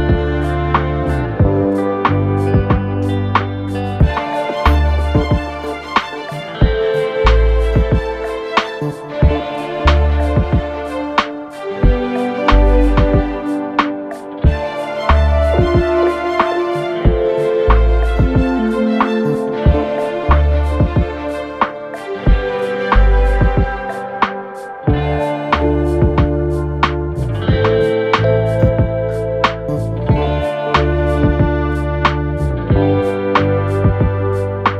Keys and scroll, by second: 3.8 ], 4.6 Escape, 9.4 ctrl+d, 9.5 Escape, 10.6 Escape, 12.0 ], 18.8 ], 22.9 ].